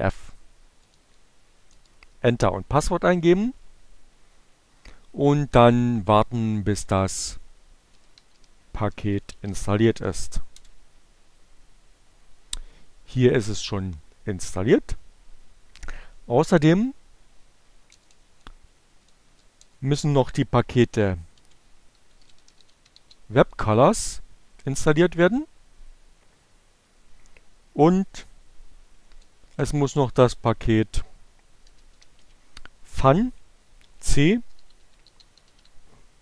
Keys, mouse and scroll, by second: 4.4 Right, 6.9 Return, 7.1-8.0 typing, 9.1-10.0 typing, 14.7 Up, 17.3 Left, 17.4 BackSpace, 19.7-20.5 typing, 22.0-23.1 typing, 27.5 Left, 27.6 BackSpace, 31.7-33.4 typing, 34.8-35.7 typing.